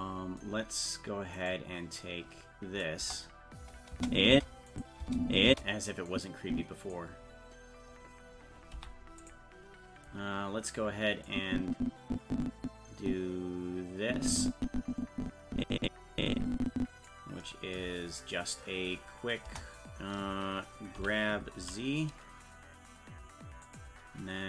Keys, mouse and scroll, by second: 1.6 right click, 3.0 KP_0, 3.9 space, 4.7 click, 5.0 space, 6.1 click, 8.7 i, 11.3-17.1 drag, 19.5 KP_0, 21.0 g.